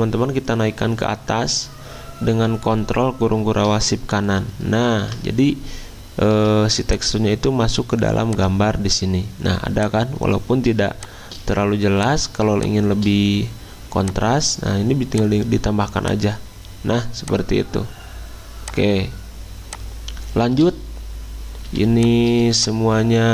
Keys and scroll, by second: 0.5 ctrl+z, 10.6 z, 21.7 c.